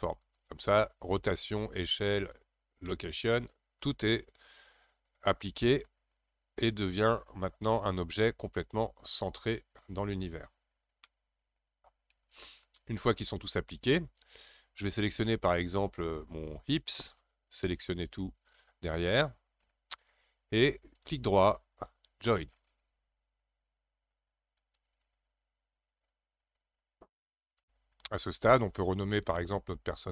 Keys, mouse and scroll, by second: 2.8-5.9 middle drag, 9.1 click, 11.0-14.1 middle drag, 14.8 scroll up 2, 15.9 click, 17.2 scroll down 1, 17.8 click, 24.0-30.0 right drag, 30.0 click.